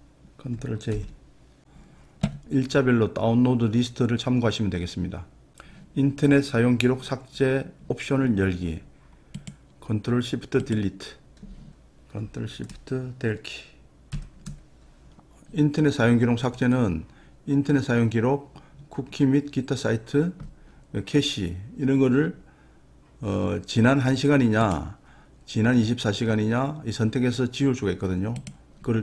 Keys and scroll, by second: 0.9 ctrl+j, 14.1 ctrl+shift+Delete.